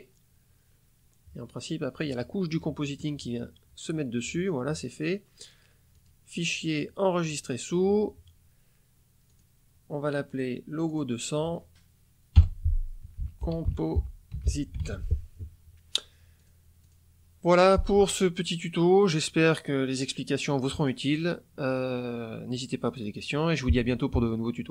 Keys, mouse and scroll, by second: 5.9 click, 7.1 click, 9.2 click, 10.2 click, 10.8 click, 13.0-14.8 typing, 16.3 click, 16.8 click.